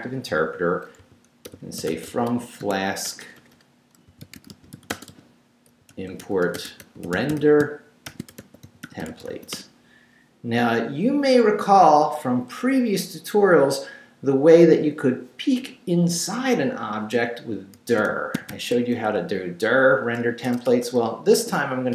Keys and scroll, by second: 0.8-9.6 typing, 17.5-19.0 typing, 20.4 BackSpace, 21.7-21.9 typing.